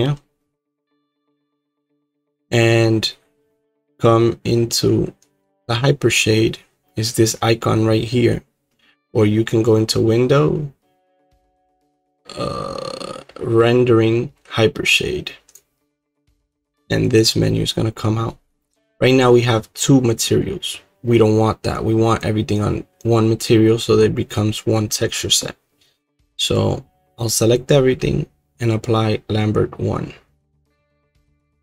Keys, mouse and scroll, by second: 0.0-1.6 drag, 14.6 click, 15.5 click, 16.4-22.1 drag, 22.1 click, 26.0 middle click, 26.1 middle click, 27.5 click, 30.9 right click.